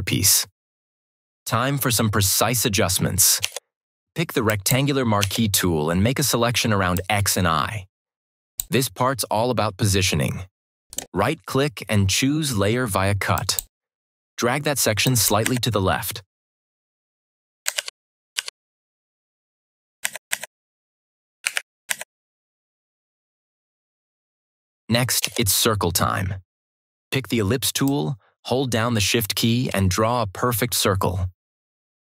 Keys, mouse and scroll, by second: 4.4 click, 6.8-8.7 drag, 10.8 right click, 10.8 right click, 13.2 click, 15.4 Left, 17.7 ctrl+-, 19.9 Left, 21.3 Right, 21.8 Left, 27.8-32.0 drag.